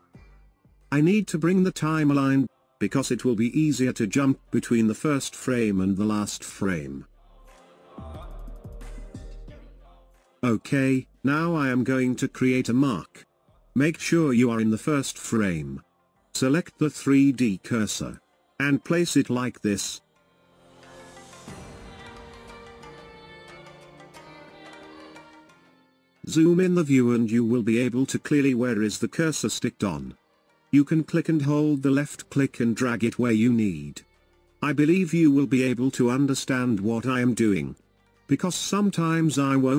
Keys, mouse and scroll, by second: 7.7-10.2 drag, 10.2 shift+space, 10.7-13.8 shift+middle drag, 14.7-16.6 drag, 17.2-18.7 drag, 18.9-22.0 drag, 25.7-26.2 scroll up 3, 26.2-29.3 shift+middle drag, 29.5-39.5 drag.